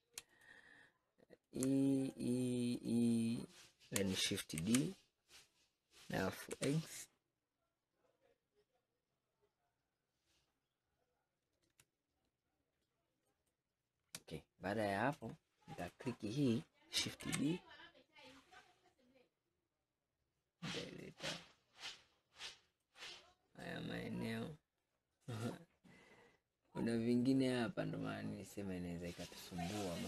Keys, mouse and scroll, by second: 0.4 click, 1.5 click, 2.2 shift+click, 2.8 shift+click, 4.7 shift+d, 15.2 click, 15.8 click, 17.3 shift+d, 23.9-24.4 scroll up 2.